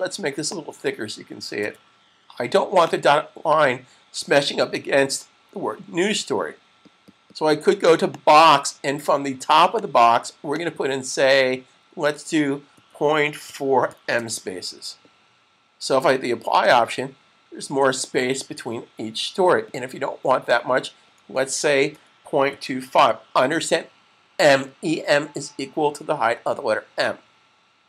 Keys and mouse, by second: 0.3 click, 1.3 typing, 2.8 click, 8.0 click, 15.6 typing, 16.6 click, 20.5 click, 22.2-22.7 typing, 25.5-26.2 typing, 27.7 click.